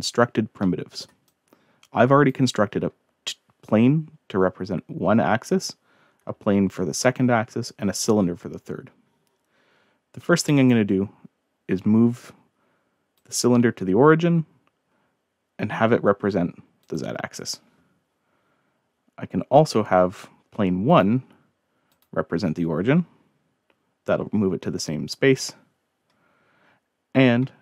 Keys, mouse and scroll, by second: 0.6-1.1 middle drag, 1.3-2.3 drag, 6.2-6.5 scroll down 2, 6.7 scroll up 2, 7.1 scroll down 1, 7.8 scroll up 2, 7.9 scroll down 1, 10.4 click, 13.1 click, 16.8 click, 20.9 click, 21.9 click.